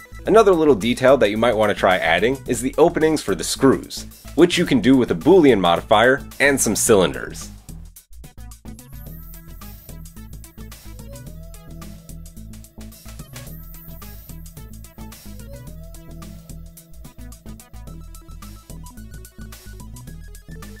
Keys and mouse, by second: 1.1-1.9 drag, 2.3-8.4 typing, 3.8 shift+right click, 3.9 Tab, 6.2 click, 8.6 right click, 9.0 Tab, 9.0 middle click, 9.3 Tab, 9.5 click, 9.7 Tab, 10.1-11.5 middle drag, 11.5 click, 11.7-15.3 typing, 12.9 Tab, 14.3-16.0 shift+right drag, 16.0-18.8 middle drag, 17.0 g, 18.1 Tab, 18.3 Tab, 18.4 Tab, 18.6 Tab, 18.8 alt+click, 19.2 g, 19.5-20.8 middle drag, 20.1 Tab, 20.6 s, 20.7 Tab.